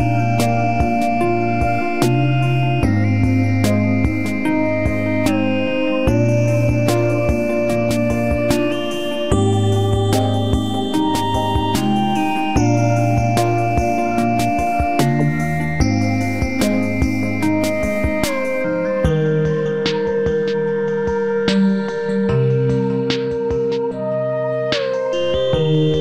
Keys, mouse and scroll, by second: 1.1 n, 9.8-10.9 drag, 10.9 Tab, 13.5 z, 13.9 Tab, 17.2-18.8 drag, 18.5 n, 19.5 z, 19.9 z, 20.9 ctrl+s, 21.3 Tab, 21.6 z.